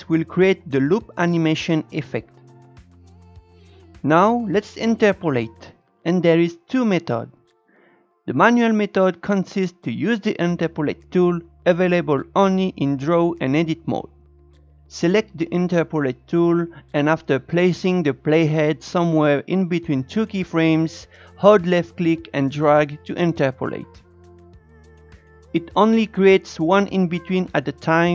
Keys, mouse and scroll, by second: 3.7 Tab, 8.3-13.3 shift+middle drag, 13.3-23.0 drag, 23.1 click, 24.6 click, 27.8-28.1 drag.